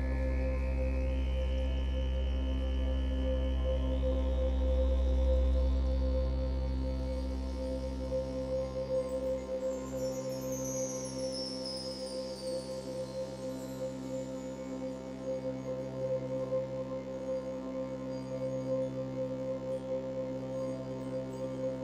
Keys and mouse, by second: 1.3 r, 1.6 x, 2.2 9, 2.2 0, 3.1 Return, 4.5 ctrl+alt+click, 6.5 click, 8.1 click, 9.3 alt+shift+click, 10.7 /, 12.4 click, 12.9-14.0 drag, 12.9 typing, 14.8 typing, 17.1 alt+shift+click, 18.1-19.1 ctrl+alt+drag.